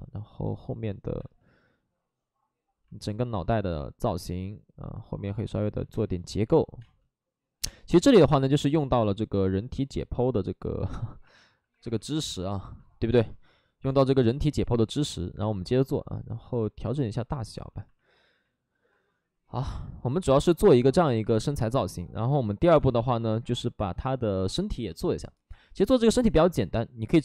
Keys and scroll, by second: 1.1 ctrl+z, 5.9 space, 6.8 space, 7.9 space, 11.5 alt+s, 11.7 alt+s, 13.0 space, 22.8 space.